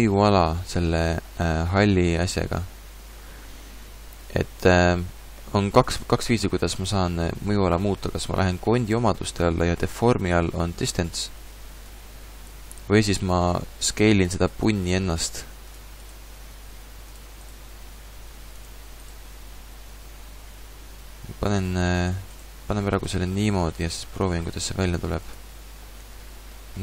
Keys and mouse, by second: 10.8 click, 12.5 ctrl+z, 13.2 s, 14.8 s, 16.4 s, 17.8 s, 19.4-20.9 drag, 19.4 s, 20.9 middle click, 21.7 click, 22.6 s, 24.0 s, 24.8 s, 26.0 Tab.